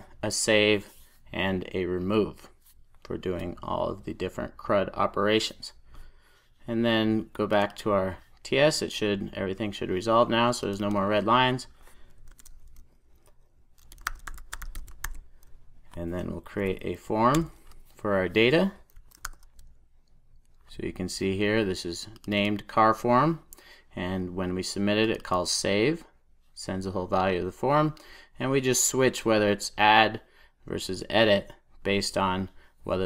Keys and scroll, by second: 1.8 super+s, 12.3 super+a, 17.2 super+j, 17.2 Return.